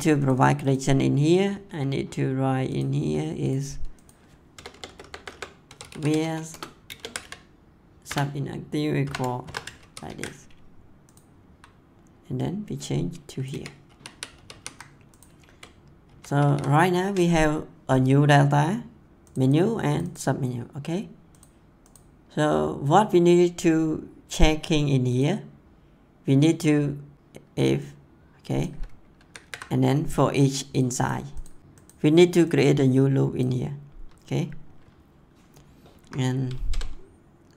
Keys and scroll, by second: 4.6-7.6 typing, 6.5 Return, 8.0 Return, 9.0 =, 9.4 shift+/, 9.8 ctrl+a, 10.1 ctrl+c, 13.5 ctrl+v, 29.1 ctrl+c, 36.6 Tab.